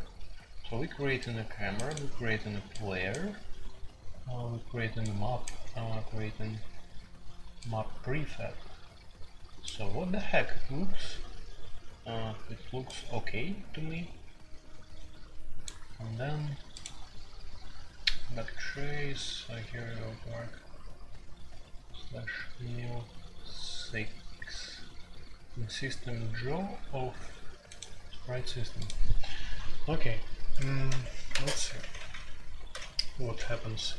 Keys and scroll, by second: 30.8 Escape, 31.3-32.7 typing.